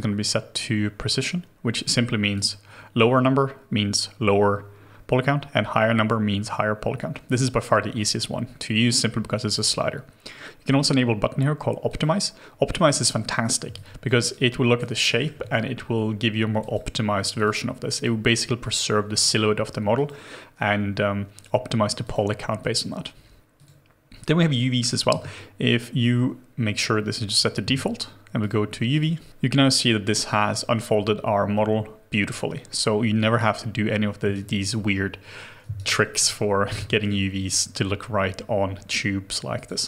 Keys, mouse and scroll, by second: 13.7 alt+click, 14.3 alt+right click, 15.0 alt+middle click, 24.2-25.2 scroll down 1, 34.3 alt+right click, 35.7 alt+right click, 36.0 alt+middle click, 36.6 alt+middle click.